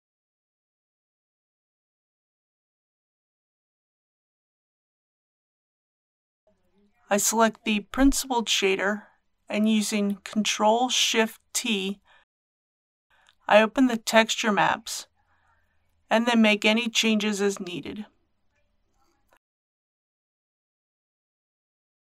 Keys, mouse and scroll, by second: 0.3 Return, 1.5 scroll up 1, 2.4 shift+middle click, 4.8-5.9 drag, 13.0 ctrl+shift+t, 13.1 click, 18.1 middle click, 19.8 click, 20.8 KP_3.